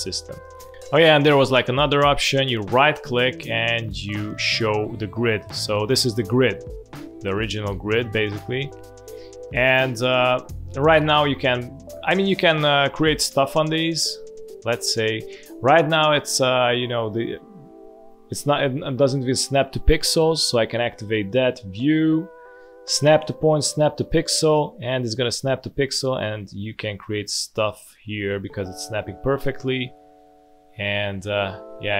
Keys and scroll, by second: 0.7 space, 8.4 space, 9.0 alt+space, 20.2 Delete, 29.0 b, 29.3 v.